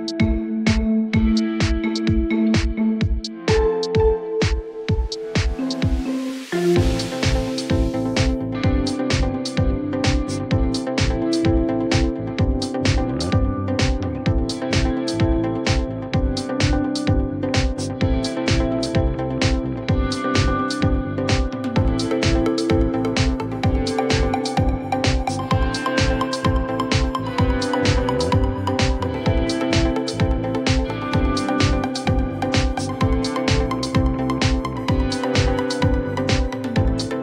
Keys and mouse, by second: 1.0 alt+click, 5.2-8.9 drag, 10.4-10.8 alt+drag, 11.3 alt+middle click, 12.1 alt+click, 13.4 alt+click, 14.7-15.9 drag, 18.5-20.5 drag, 19.5 KP_0, 22.0-22.5 alt+drag, 22.9-23.3 alt+drag, 23.5-23.9 alt+middle drag, 24.7 click, 29.7-30.5 alt+drag, 31.4 alt+click, 32.9-34.1 alt+drag, 35.2 alt+click.